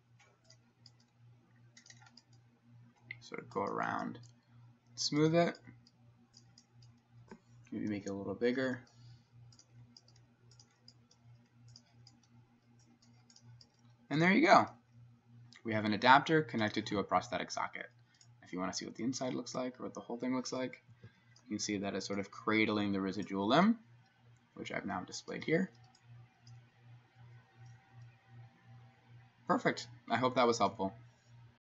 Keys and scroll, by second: 8.1-8.8 ], 21.0 Escape.